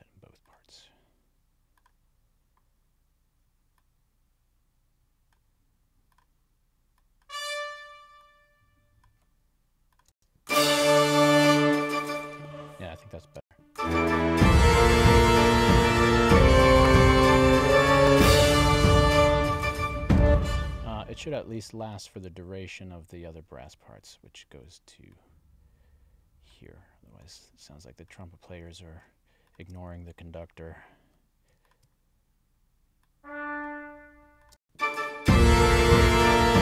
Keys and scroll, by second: 10.1 space, 12.3 space, 20.3 space, 34.6 space.